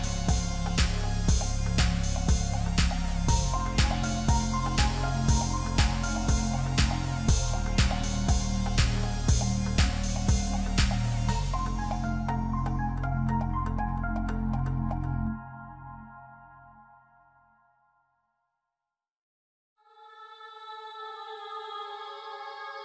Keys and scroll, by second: 11.0-11.3 typing, 11.6 Return, 14.3 s, 19.8 s.